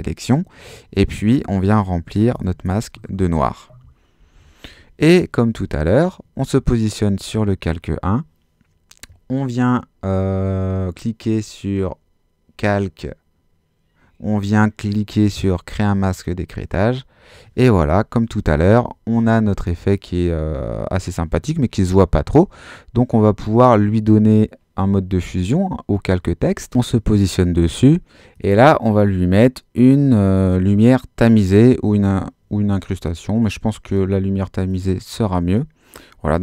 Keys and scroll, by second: 2.3 shift+BackSpace, 2.6 shift+Return, 4.2 super+d.